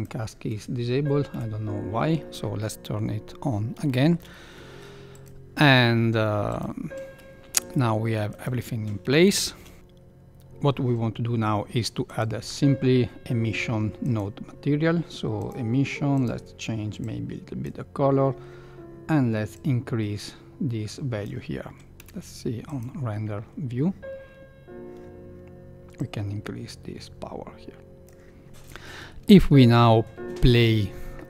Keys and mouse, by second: 1.2 n, 3.8 shift+middle click, 6.4 click, 7.6 g, 9.2 shift+Left, 14.1-15.5 drag, 16.1 click, 19.5-21.2 drag, 21.9 z, 26.0 click.